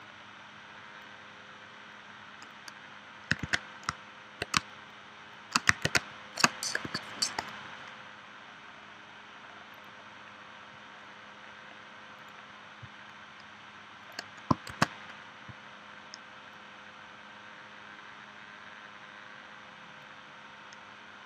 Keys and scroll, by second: 3.4 super+z, 4.6 space, 5.9 space, 6.8 p, 14.7 shift+c.